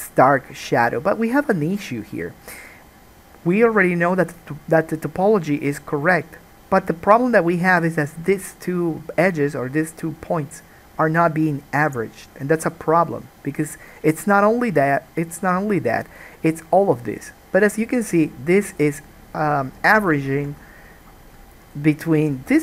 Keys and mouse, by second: 18.8 click, 18.9 middle click, 19.8 click, 19.9-22.3 shift+middle drag, 22.3 click, 22.4-22.6 middle drag.